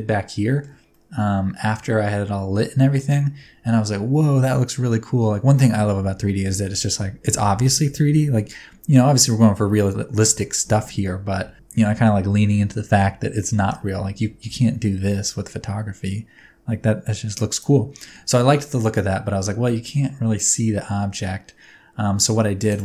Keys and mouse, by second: 0.5 shift+middle click, 0.9 middle click, 3.4 Tab, 14.4 g, 14.6 y, 20.4-22.7 drag.